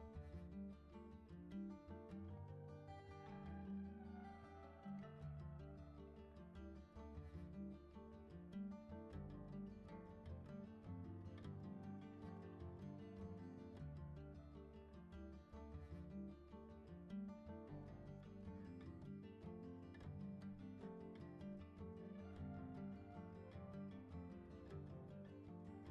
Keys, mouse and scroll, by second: 0.7 click, 4.9 click, 7.2-11.9 drag, 13.0-25.6 drag.